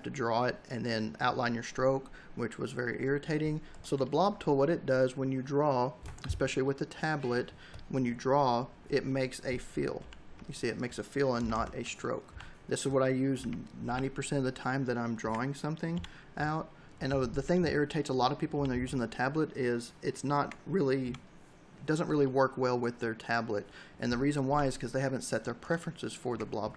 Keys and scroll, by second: 9.8 ctrl+y, 11.2 ctrl++, 12.1 v, 13.2 ctrl+y, 13.7 v, 15.0 Delete, 15.8 b, 18.3 v, 20.1 Delete, 20.8 b, 24.2 v, 26.1 Delete.